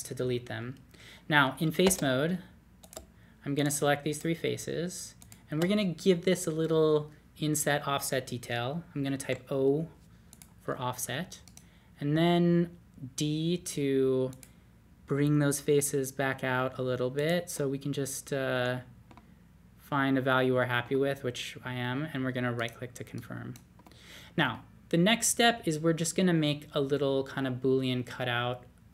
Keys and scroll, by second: 9.2 o, 12.1 d, 15.7 d.